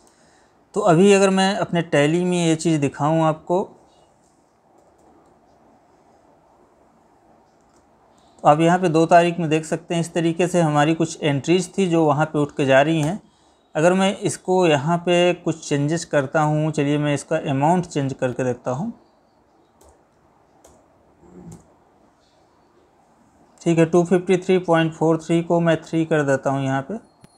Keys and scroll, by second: 0.2 Left, 7.9 Escape, 26.0 Right, 26.4 Left.